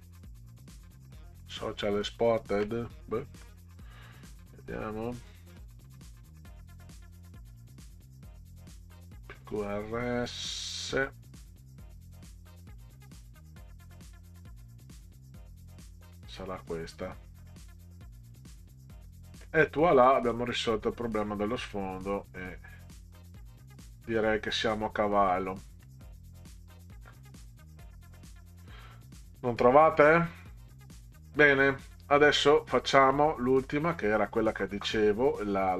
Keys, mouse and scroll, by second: 5.3 click, 7.1 click, 7.4 click, 9.5 click, 10.9 click, 12.7 click, 13.3 click, 16.3 click, 18.3 click, 20.3 click, 24.2 click, 25.3 middle click, 26.6-32.3 middle drag, 32.8-33.1 middle drag.